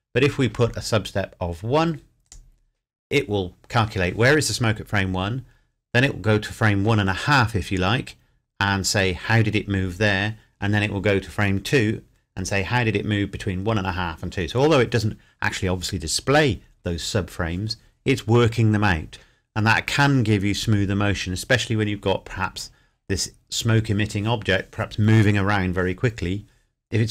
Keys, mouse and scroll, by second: 2.2 click.